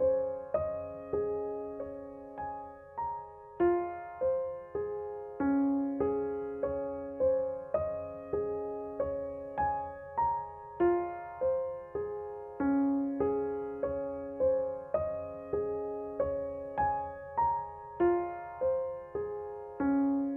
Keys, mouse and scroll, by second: 13.3 ctrl+z, 14.7 click, 15.4 ctrl+z, 15.8 click, 16.8 ctrl+z, 19.1-20.3 drag.